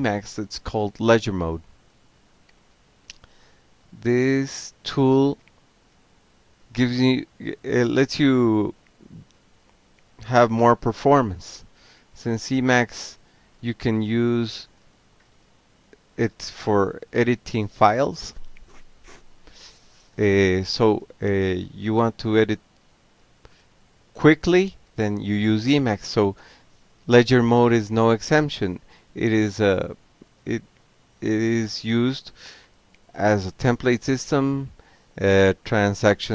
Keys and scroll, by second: 2.0 ctrl+c, 3.2 ctrl+a, 3.9 0, 7.6 ctrl+g, 8.3 alt+q, 9.2 ctrl+c, 9.6 ctrl+a, 11.8-14.1 typing, 14.5 Return, 18.1 m, 18.4 e, 18.5 Tab, 21.9 Return, 22.9 Tab, 23.5 l, 23.6 Tab, 24.7 a, 24.8 Tab, 26.3-29.8 typing, 28.3 Return, 30.4 Up, 30.8 Up, 31.0 Down, 31.2 Down, 31.2 Down, 32.6 Tab, 33.3 c, 33.6 Tab.